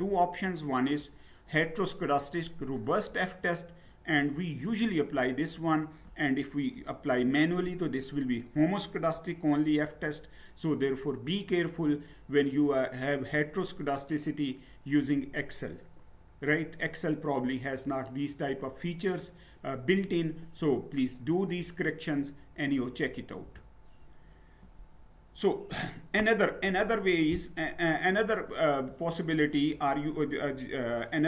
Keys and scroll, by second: 23.4 Down.